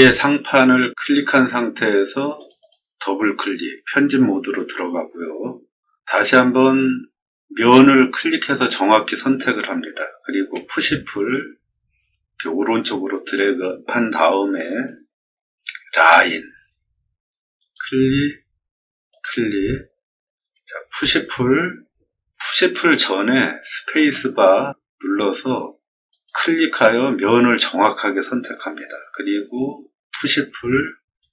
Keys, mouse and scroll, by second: 2.3 click, 2.5 click, 4.0-5.1 middle drag, 7.7 click, 11.2-12.7 drag, 16.0 l, 17.5 click, 19.0 click, 20.8 p, 23.9 space, 26.0 click, 30.0 p, 31.1-31.3 drag.